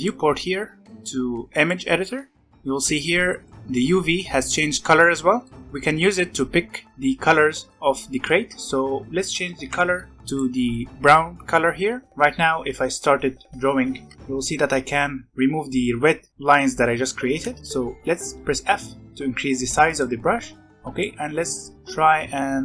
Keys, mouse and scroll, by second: 2.2 scroll down 4, 2.4-3.4 scroll up 1, 3.4-4.7 middle drag, 4.7-5.2 scroll up 4, 5.2 scroll down 1, 5.4 middle click, 5.5 scroll up 1, 5.6-7.2 scroll down 3, 9.5 e, 11.7-12.0 scroll down 1, 12.0-12.5 scroll up 1, 13.0-16.3 drag, 16.3 ctrl+z, 17.0 ctrl+z, 17.6 f, 20.7-22.6 drag.